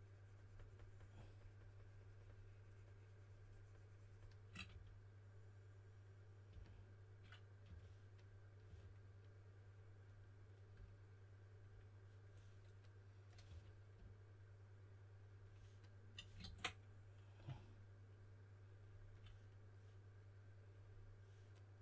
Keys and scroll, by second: 4.7 typing, 6.5-8.6 typing, 13.4 4, 16.4 super+z.